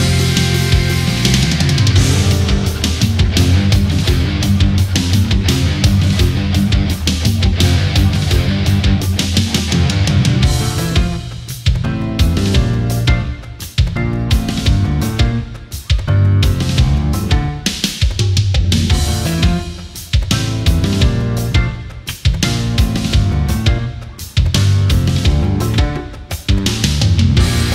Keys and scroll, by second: 5.1 Up, 5.4 Left, 25.6 ctrl+=.